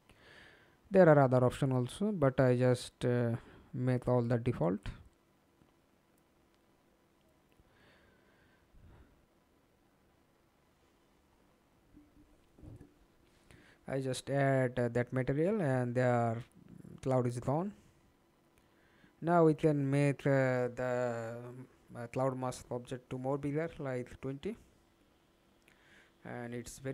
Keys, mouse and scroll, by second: 0.5 scroll up 4, 1.9-3.9 scroll up 1, 3.9-6.6 scroll up 10, 6.6-9.2 scroll up 7, 9.5 middle click, 10.4 ctrl+space, 11.5 middle click, 16.0-19.8 scroll up 11, 21.1-22.1 typing, 24.1 alt+click, 25.1 alt+click, 26.7 alt+click.